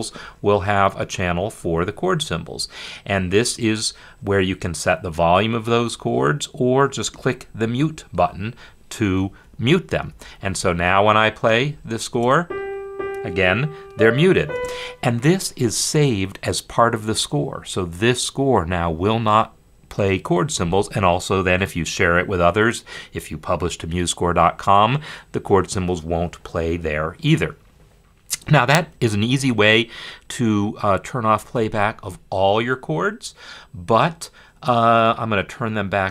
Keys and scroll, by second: 10.0 F10, 12.1 space, 14.7 space, 31.3 F10.